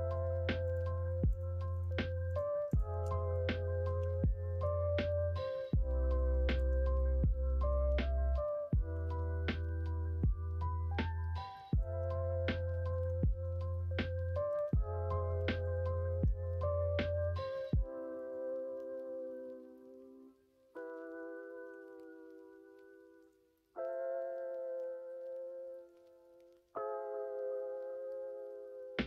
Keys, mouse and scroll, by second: 0.6 shift+click, 1.3 click, 1.7 shift+click, 2.3 shift+click, 2.7 shift+click, 3.0 middle click, 4.0 e, 6.8 middle click, 8.1 middle click, 8.5 middle click, 9.0 ctrl+z, 9.4 middle click, 10.0 middle click, 10.8 middle click, 11.7 click, 12.4 2, 12.8 click, 13.2 middle click, 14.7 click, 15.6 alt+click, 16.5 middle click, 17.0 s, 18.8 middle click, 19.2 ., 20.2 click, 21.2 middle click, 21.7 s, 24.1 ., 26.3-29.0 middle drag.